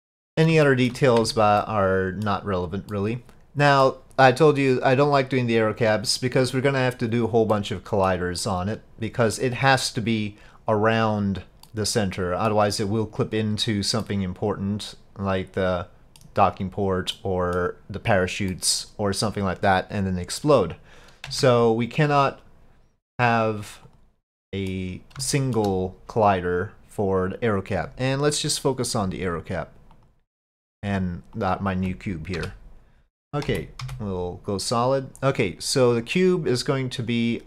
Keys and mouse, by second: 0.7 shift+click, 1.3 Tab, 1.6-3.0 drag, 3.0 middle click, 5.1 middle click, 7.5 middle click, 8.4 middle click, 11.7 middle click, 14.0-16.2 middle drag, 17.2 middle click, 18.5 middle click, 21.3 Tab, 22.1-24.0 drag, 24.5 middle click, 25.3-25.6 shift+middle drag, 26.3 click, 31.4 ctrl+click, 32.4 KP_Divide, 33.5 z, 36.0 click, 37.2 click.